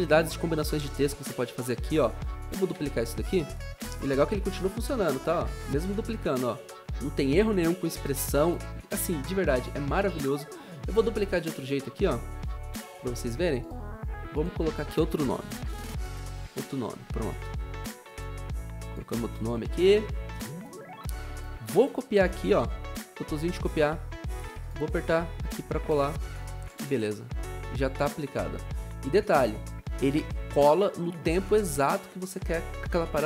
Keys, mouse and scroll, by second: 2.7 ctrl+d, 4.3-5.9 typing, 7.9 Delete, 15.4-16.8 typing, 19.6 ctrl+alt+Home, 26.7 v, 30.1 0.